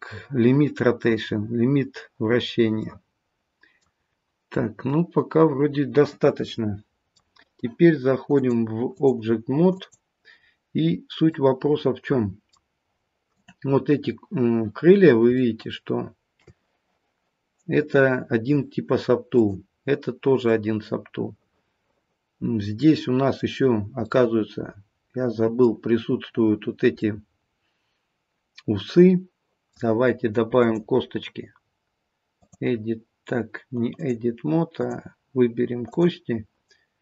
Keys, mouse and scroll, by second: 2.4-4.9 scroll down 3, 2.8 middle click, 4.9 middle click, 8.3 click, 10.5-11.3 scroll up 1, 11.3 middle click, 13.3 click, 14.8-16.4 scroll up 2, 15.3 shift+middle click, 19.3 click, 20.5 middle click, 23.6-24.0 scroll up 1, 24.0 middle click, 27.0 middle click, 30.5 click, 34.1 click, 35.9 click.